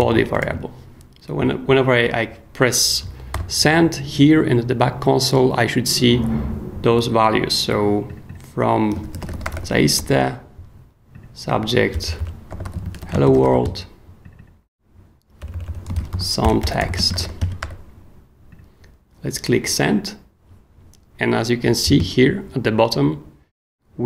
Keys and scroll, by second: 0.0-0.2 typing, 0.4 super+s, 3.3 super+j, 8.7-10.0 typing, 12.0-14.1 typing, 15.4-18.1 typing.